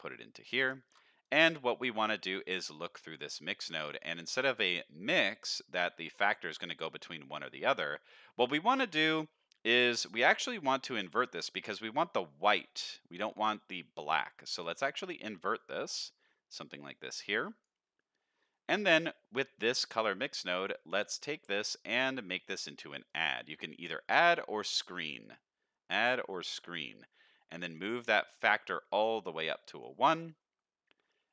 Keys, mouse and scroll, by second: 0.9 ctrl+shift+click, 1.2 click, 2.0 middle click, 2.6 click, 3.4 middle click, 3.8-4.4 scroll up 1, 4.4-5.3 drag, 4.4 scroll up 1, 5.4 click, 5.9-8.7 drag, 8.9 click, 10.1 middle click, 10.6 middle click, 14.7 click, 15.6 click, 17.2 click, 18.0 middle click, 18.4 middle click, 18.9 click, 20.5-23.1 drag, 25.1-26.3 drag, 26.5 click, 27.2 click, 28.0 middle click, 28.7 middle click, 29.4-29.8 drag, 30.3 middle click, 31.1 middle click.